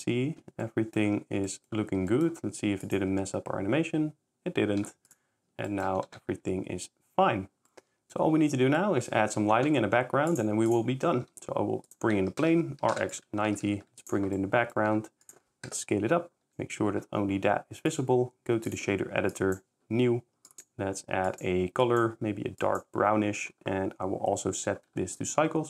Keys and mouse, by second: 0.4 s, 1.4 s, 1.5 middle drag, 2.1 s, 2.9 click, 3.1 s, 5.1 shift+click, 5.5 shift+s, 6.0 shift+c, 6.2 ctrl+shift+s, 7.7 drag, 11.3-13.7 typing, 14.9 s, 16.5 g, 16.5 z, 18.0-18.9 drag, 19.4 click.